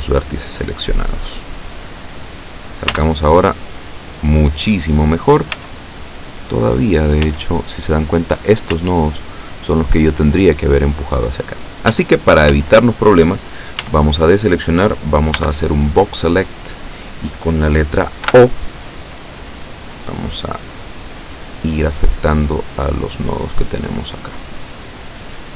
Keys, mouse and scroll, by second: 0.7 scroll up 1, 0.9-1.7 scroll down 2, 3.0 z, 5.6 z, 6.7-7.1 scroll up 2, 7.3 z, 8.8 z, 12.0 z, 13.9 a, 15.4 b, 16.0-17.1 drag, 18.4 o, 19.3 click, 20.1-20.4 scroll up 1, 20.6-21.2 scroll down 2, 21.7-23.0 scroll down 5, 23.3-23.7 scroll down 2.